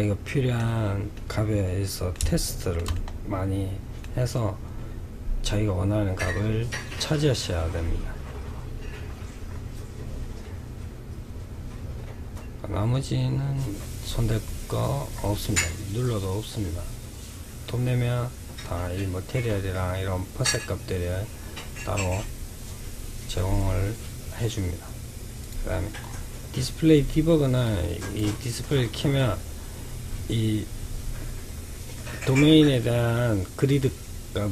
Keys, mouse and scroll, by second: 8.1-12.4 scroll down 7, 13.3-14.4 scroll up 7, 14.4-15.1 scroll down 3, 15.1-16.0 scroll down 7, 16.0-18.2 scroll down 2, 18.2-19.1 scroll down 1, 24.7 click, 25.3-27.1 scroll down 10, 27.1 click, 27.9-30.9 middle drag.